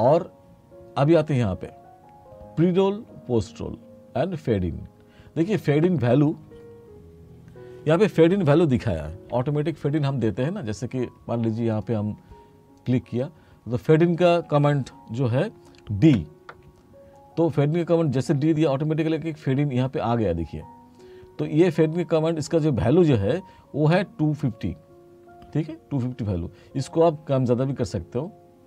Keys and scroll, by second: 16.2 d.